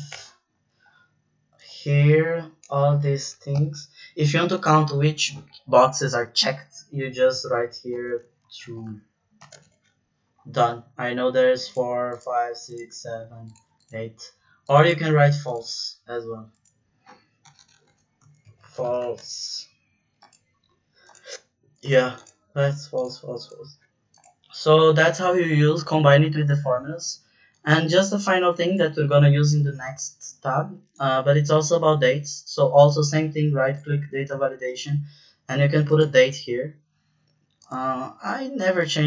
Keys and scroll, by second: 3.5 ,, 7.9-9.3 typing, 9.5 Return, 17.4-19.5 typing.